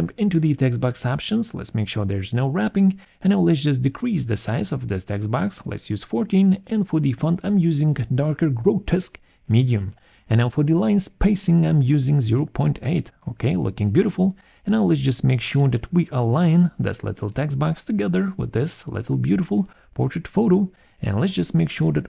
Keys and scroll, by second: 5.0 4, 5.1 Return, 6.8 Return, 8.2 alt+5, 10.4 BackSpace, 10.5 8, 21.2 ctrl+g.